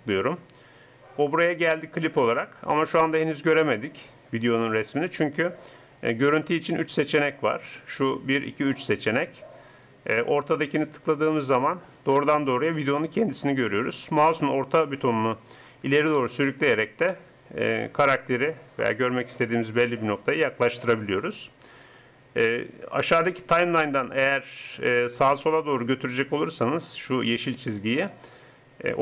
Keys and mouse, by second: 10.5-12.3 drag, 28.1-29.0 drag.